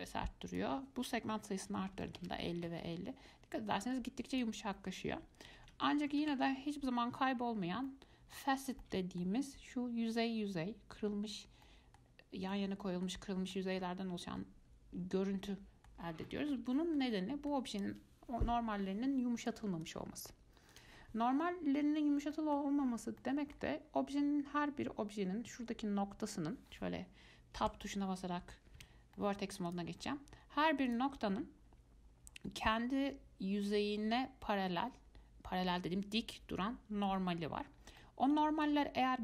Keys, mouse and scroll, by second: 0.7-3.7 drag, 4.5-7.5 drag, 7.5-8.1 scroll up 4, 8.1 middle click, 8.6 scroll down 1, 9.0-11.6 middle drag, 11.6 scroll down 2, 11.9-12.3 middle drag, 12.3 scroll up 2, 12.7 middle click, 13.5 scroll down 1, 13.7-16.2 middle drag, 16.2-16.5 scroll down 2, 16.5-19.6 middle drag, 19.6 click, 20.0 click, 20.9 click, 22.5 middle click, 23.1-23.4 scroll up 4, 23.4 middle click, 23.9-24.8 scroll up 1, 24.8-26.1 scroll up 1, 26.1-26.4 scroll up 1, 26.4 click, 26.9-27.5 scroll down 5, 27.9 Tab, 28.1-28.8 scroll up 3, 29.0 1, 29.4 middle click, 29.9 click, 30.3-30.6 scroll up 2, 31.1 click, 38.0 scroll down 2, 38.2 scroll up 1, 38.2 middle click, 38.5-39.2 middle drag.